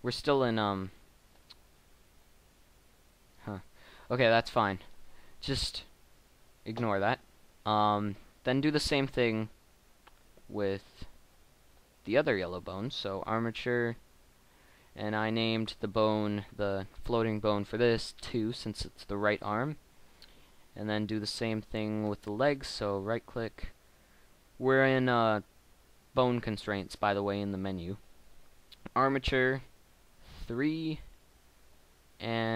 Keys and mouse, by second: 1.4 r, 3.3 middle click, 6.1 middle click, 10.9 middle click, 19.0-21.8 middle drag, 27.5 middle click, 29.5-31.1 middle drag.